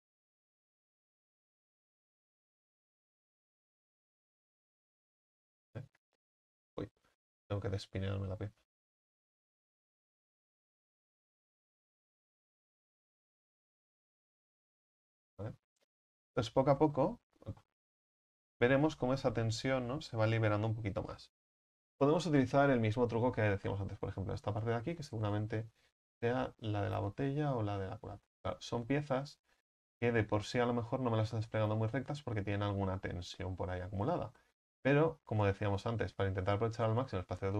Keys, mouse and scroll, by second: 1.5 u, 1.9 a, 2.1 a, 4.3 u, 7.1 a, 7.4 a, 11.4-14.0 drag, 14.0 u, 14.9-15.5 scroll down 5, 15.5 Tab, 17.7 Tab, 18.9-26.3 right drag, 26.3-26.7 scroll down 3, 27.1-27.6 scroll up 3, 34.0-37.5 right drag.